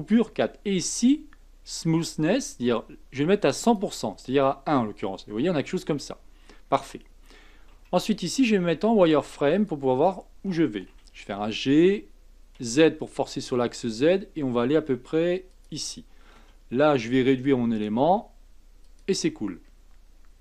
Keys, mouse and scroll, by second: 2.4-5.3 drag, 5.3-5.8 scroll down 2, 5.8-7.7 scroll up 1, 7.7 z, 8.7 z, 10.9 g, 16.3 s, 19.3-20.1 scroll up 4, 20.1-20.4 scroll down 2.